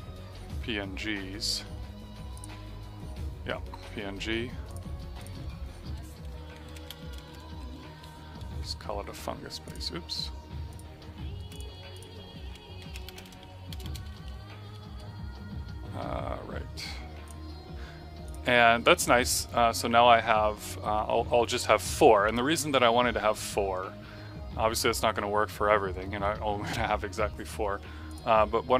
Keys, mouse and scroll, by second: 2.3 click, 6.6 End, 6.8-8.3 typing, 9.6 click, 12.8 End, 13.0-14.7 typing, 17.2 click, 28.0 click.